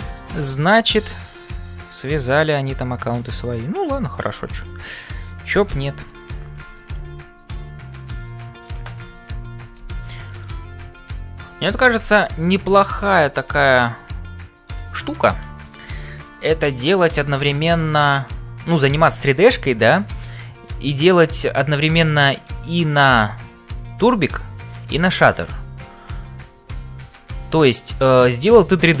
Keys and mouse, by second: 0.0-29.0 typing, 3.1 click, 5.6 ctrl+l, 7.4-8.7 middle drag, 15.1 middle click, 16.4 shift+middle click.